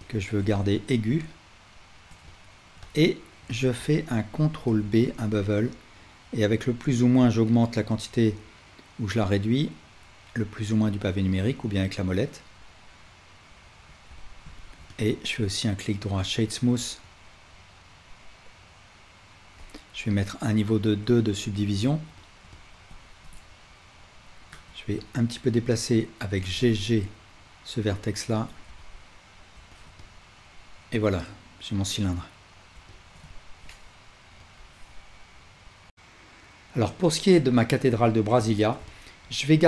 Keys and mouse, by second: 0.0 shift+click, 0.5 click, 1.5 shift+middle click, 1.7-13.4 shift+drag, 4.7 ctrl+b, 13.6 Tab, 14.2-15.0 ctrl+drag, 15.7-21.6 right drag, 17.2-21.6 alt+drag, 23.2 Tab, 23.2-25.1 drag, 24.5 1, 25.1-29.3 right drag, 26.4 g, 28.3 Tab, 28.8-29.3 alt+drag, 29.3-35.9 alt+shift+middle drag, 35.9-39.6 drag.